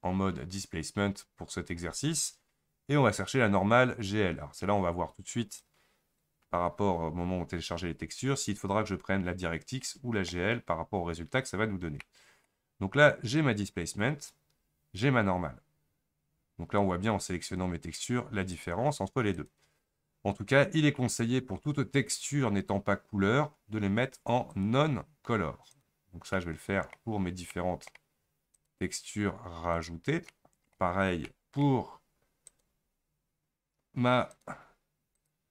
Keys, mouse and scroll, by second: 10.7-13.5 middle drag, 13.5-28.2 drag, 28.2-29.9 middle drag, 29.9-32.0 drag, 32.0-34.5 middle drag, 34.5-35.5 drag.